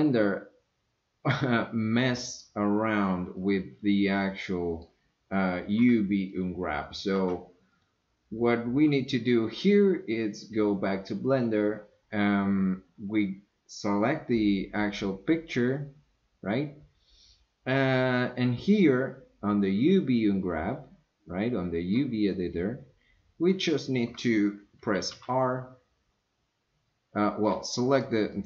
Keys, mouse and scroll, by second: 3.4 click, 4.2-4.9 middle drag, 6.3 click, 7.1 Tab, 7.7 click, 14.8 click, 15.5 click, 25.1 r, 28.0 click, 28.3 click.